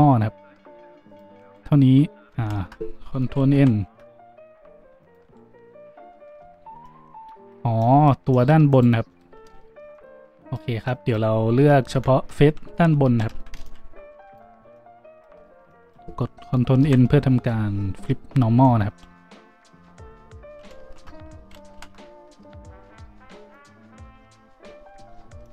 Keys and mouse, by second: 1.4 click, 2.3 ctrl+z, 3.5 ctrl+n, 5.0 click, 5.2 a, 8.7 click, 9.3-10.4 drag, 10.6-12.8 middle drag, 12.8 z, 14.9 a, 14.9 b, 16.5 z, 16.8 ctrl+n, 18.9 click, 19.0 a, 19.8 ctrl+click, 20.8 ctrl+z, 21.3 ctrl+click, 21.7 ctrl+n, 21.9-24.6 drag, 24.6 a.